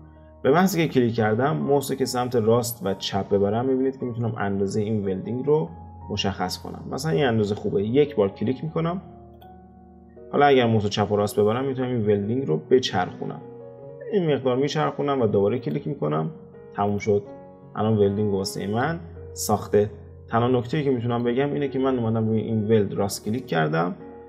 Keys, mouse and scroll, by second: 16.9 click, 17.4-18.1 scroll up 3, 18.1-23.4 shift+middle drag, 23.4-24.2 right drag.